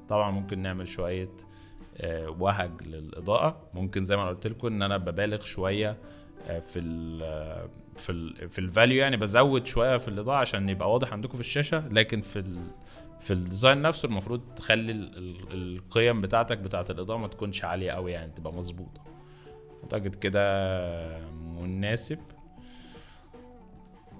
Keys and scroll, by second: 1.6 z, 5.1 x, 10.2 z, 12.5-13.5 typing, 18.4 z, 22.3 z.